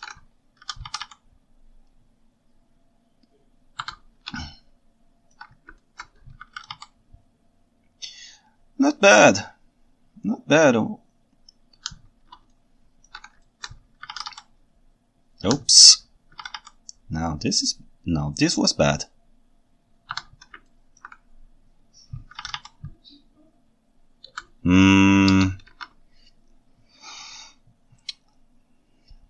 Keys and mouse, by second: 0.6 r, 1.0 y, 1.2 y, 4.0 Escape, 4.4 ctrl+shift+middle click, 5.8 ctrl+alt+middle click, 5.9 click, 6.0 alt+right click, 6.4 r, 6.7 y, 6.9 y, 12.5 ctrl+shift+middle click, 12.7 ctrl+shift+right click, 12.7 ctrl+shift+middle click, 13.1 ctrl+shift+right click, 13.5 ctrl+alt+right drag, 14.1 r, 14.3 y, 15.6 Escape, 16.3 r, 16.6 y, 20.7 ctrl+alt+right click, 22.3 r, 22.6 y, 24.5 Escape, 25.3 ctrl+Tab, 25.7 alt+a.